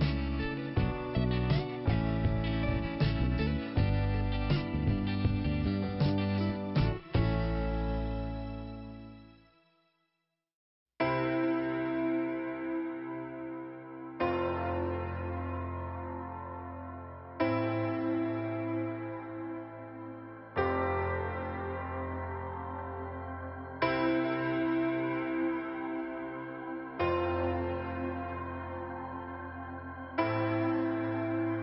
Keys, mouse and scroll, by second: 0.2 click, 0.9-1.6 scroll up 1, 1.7 click, 3.9 click, 4.7 click, 5.3 click, 6.4 click, 7.2 click, 10.3 click, 11.4 middle click, 12.4 click, 24.0 click, 25.2 click, 26.9 click, 27.4 click, 29.7 click, 30.7 click.